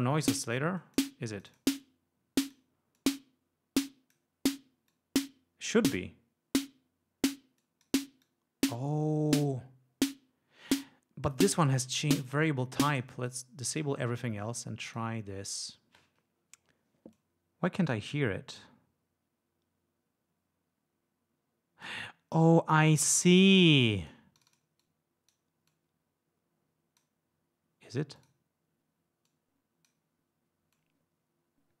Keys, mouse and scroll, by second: 0.9 click, 1.4-1.8 drag, 1.9-2.8 drag, 3.0-4.4 drag, 5.0-6.0 drag, 7.7 click, 8.3-11.0 drag, 13.0 click, 13.4 click, 13.8 click, 14.7-15.2 drag, 17.2-18.2 drag, 18.7-22.1 drag, 24.0 click, 24.5 click, 24.9-25.6 drag, 25.8-27.3 drag, 28.3 click, 29.4-30.2 drag, 30.8-31.8 drag.